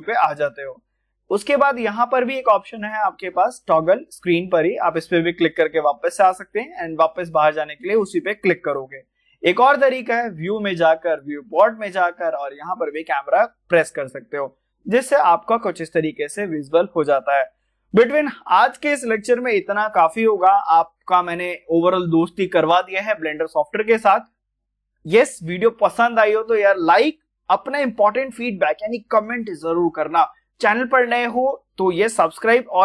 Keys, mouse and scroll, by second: 0.8 scroll down 1, 2.7 scroll down 1, 3.4 click, 9.7 click, 9.7 click, 16.0 click.